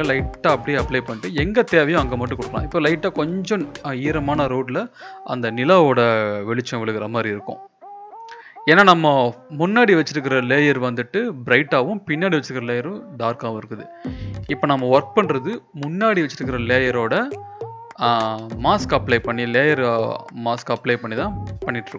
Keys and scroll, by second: 0.0-2.7 typing, 14.4-15.1 typing, 17.3-18.0 [, 19.6 ctrl+z, 19.7 ctrl+z, 20.7 ctrl+z.